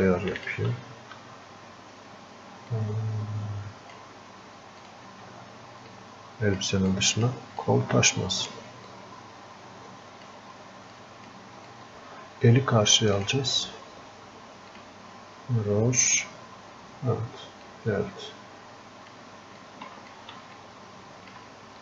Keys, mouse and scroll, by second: 7.7-20.9 drag, 20.9-21.8 alt+drag.